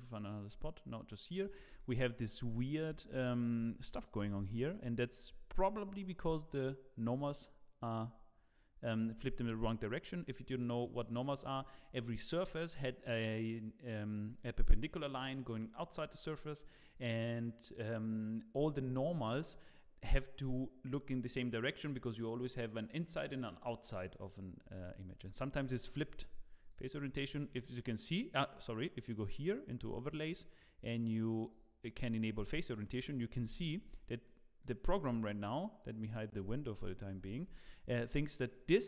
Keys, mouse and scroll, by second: 0.0 middle click, 1.4 scroll up 4, 2.1 middle click, 2.8 scroll up 3, 3.2 shift+middle click, 4.1-4.5 scroll up 3, 4.5 shift+middle click, 4.9 scroll down 4, 5.9 middle click, 7.0 click, 7.7-8.1 scroll down 1, 10.8 click, 27.1 scroll down 5, 27.8 middle click, 27.8 scroll down 2, 29.8 click, 32.6 middle click, 33.3-33.6 scroll up 2, 33.6 shift+middle click, 33.9 middle click, 34.6 middle click, 34.8 shift+middle click, 35.0 scroll up 2, 35.8 click, 37.0 h, 37.5 middle click, 37.9 click, 38.3 middle click.